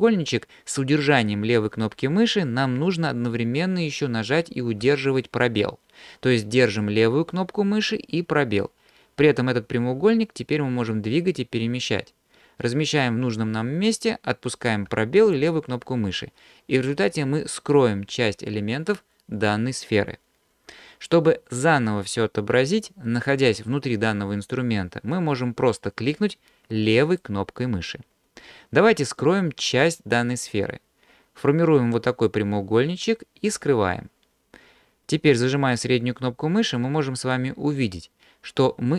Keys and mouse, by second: 27.1 click, 31.9-33.5 drag, 35.8-37.3 middle drag.